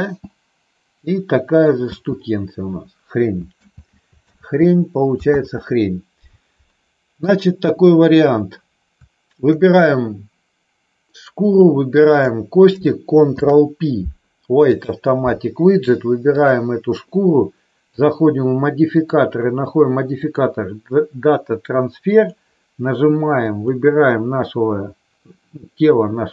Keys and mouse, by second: 0.0 space, 3.4 ctrl+space, 3.6 ctrl+z, 4.4 ctrl+z, 5.4 ctrl+z, 7.1 click, 12.0 shift+click, 13.4 ctrl+p, 16.4 click, 17.8 click, 18.8-20.4 drag, 22.1 click.